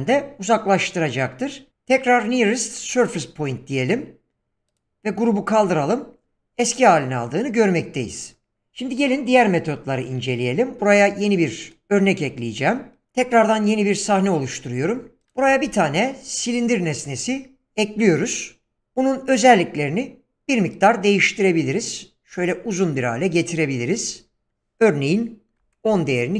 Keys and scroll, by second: 15.2 x, 15.6 shift+a, 25.3-26.1 typing.